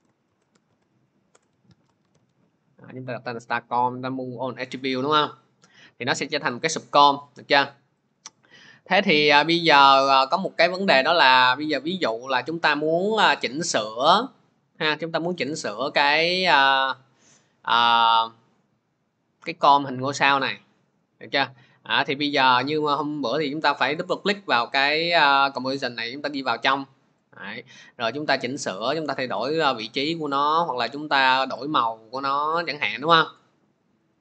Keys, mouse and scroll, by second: 0.0-2.6 typing, 8.1 click, 15.5 click, 23.9 click, 24.1 click, 27.2 click, 29.6 click, 30.4-31.0 scroll, 32.5 click.